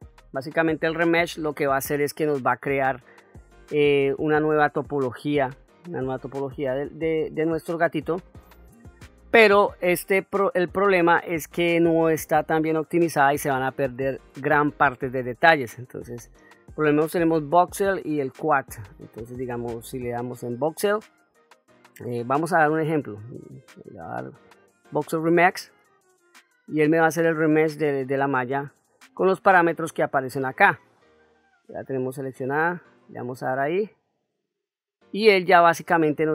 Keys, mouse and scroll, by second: 0.4 middle click, 2.9-4.7 drag, 5.8-6.7 middle drag, 23.8-25.1 drag, 32.5 click, 36.1-36.3 ctrl+middle drag.